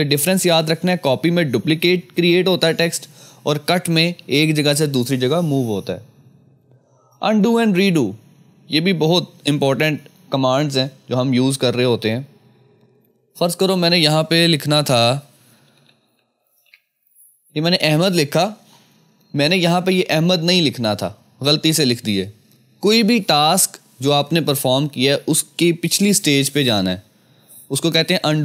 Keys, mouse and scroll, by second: 13.4 ctrl+v, 13.5 click, 15.4-17.2 typing.